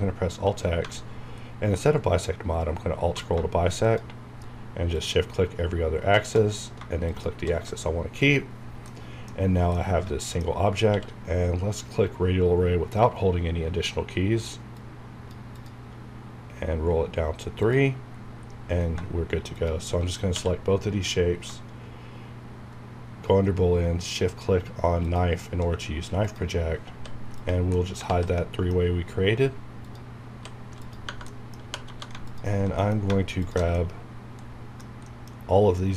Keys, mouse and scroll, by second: 1.3-1.7 alt+scroll down 1, 3.8 shift+click, 7.1 shift+click, 8.7 scroll down 1, 8.9 middle click, 9.3 scroll up 1, 9.7 middle click, 10.9 q, 14.7 click, 16.2 scroll down 1, 17.6 click, 18.9-19.3 scroll up 1, 19.5 shift+click, 20.3 q, 25.0 shift+click, 26.9 h, 27.4 click, 27.7 middle click, 28.1 alt+z, 28.3-30.3 middle drag, 29.8 click, 30.3 h, 30.8 click, 31.0 Tab, 31.3 middle click, 31.6-32.1 typing, 32.3 alt+click, 32.8 middle click, 33.4 alt+shift+click, 33.7 middle click, 34.8 scroll down 1, 35.0 middle click.